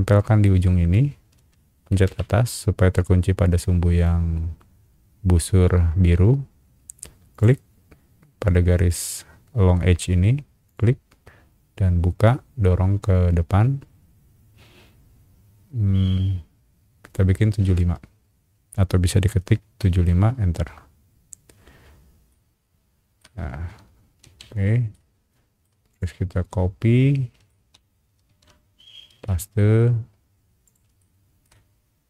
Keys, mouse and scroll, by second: 0.1 scroll up 2, 2.0 Up, 4.0 scroll down 2, 7.3 click, 10.6 click, 14.8 middle click, 19.8 KP_7, 20.1 KP_5, 20.6 KP_Enter, 21.5 middle click, 21.8 middle click, 22.3 middle click, 23.4-23.8 scroll down 4, 23.8 space, 24.2 Escape, 24.9 middle click, 25.9 click, 26.5-27.5 middle drag, 29.2 ctrl+v, 29.4 scroll up 1, 30.6 click, 31.0 shift+middle click, 31.4 shift+scroll up 1.